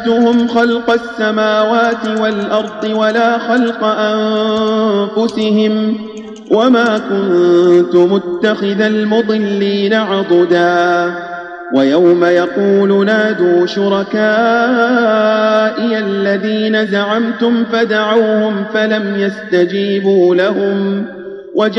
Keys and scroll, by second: 2.0 space, 3.5 space, 5.2 space, 6.8 space, 10.0 Tab.